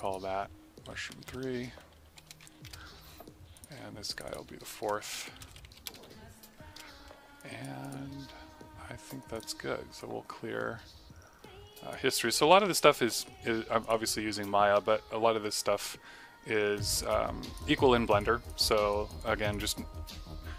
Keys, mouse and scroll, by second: 1.7 v, 2.2 BackSpace, 2.4 3, 2.6 Return, 3.5 click, 5.1 ctrl+v, 5.8 BackSpace, 5.9 4, 6.6 Return, 7.4 alt+click, 14.4 middle click, 16.7 right click, 17.0 click, 18.1 click, 18.8 right click, 19.1 click.